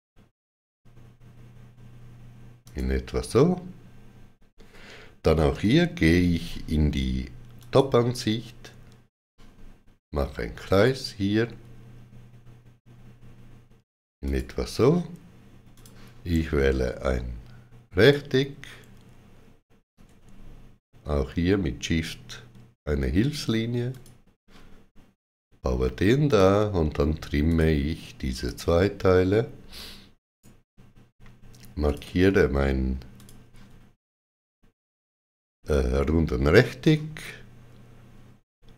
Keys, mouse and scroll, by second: 2.5 click, 7.5 click, 10.6 click, 14.1 click, 17.7 click, 17.8 click, 23.7 click, 26.1 click, 30.1 right click, 31.7 click, 33.0 shift+click.